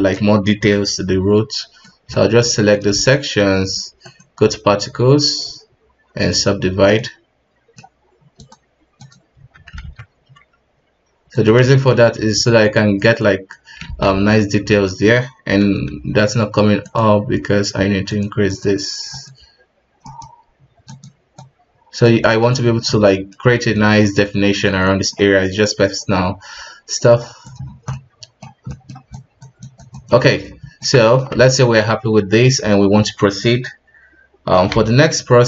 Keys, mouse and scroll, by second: 0.7 b, 2.1-2.9 middle drag, 2.9 shift+z, 3.1 middle click, 4.0-7.0 drag, 7.0-8.4 middle drag, 8.4-9.4 drag, 9.4 KP_1, 9.8 alt+a, 11.3 click, 11.7 shift+middle drag, 11.9 scroll up 1, 12.1 f, 12.6-13.9 drag, 13.9 ctrl+z, 14.1 ctrl+z, 15.7 alt+q, 16.8-19.9 drag, 21.4-22.7 drag, 22.7 scroll down 1, 22.9-23.4 middle drag, 23.4 scroll up 1, 23.7-24.2 middle drag, 24.2 click, 24.8-25.5 middle drag, 25.5-26.3 drag, 26.3 KP_1, 27.0 click, 27.6-27.9 scroll down 1, 27.9-29.1 middle drag, 29.1-30.2 drag, 30.2-30.6 middle drag, 30.6 ctrl+Tab, 31.1 KP_1, 31.4 alt+a, 31.6-32.6 middle drag, 32.6-33.6 scroll down 1, 33.6-33.9 scroll down 3, 34.7 F7.